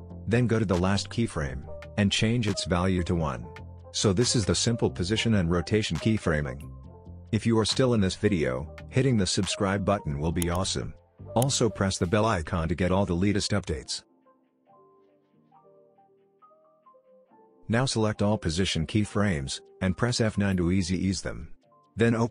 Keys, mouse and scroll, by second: 4.1 Return, 5.2-5.8 click, 5.6 space, 16.0 space, 16.2-18.8 drag, 20.9 F9.